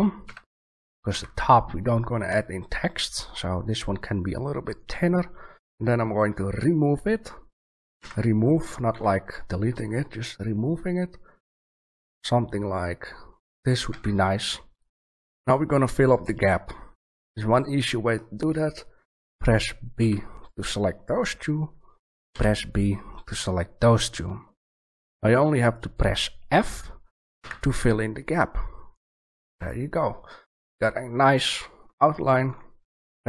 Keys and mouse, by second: 0.2 s, 7.9 g, 13.6 click, 13.9 a, 20.0 b, 22.3 b, 27.3 f, 29.4 Tab.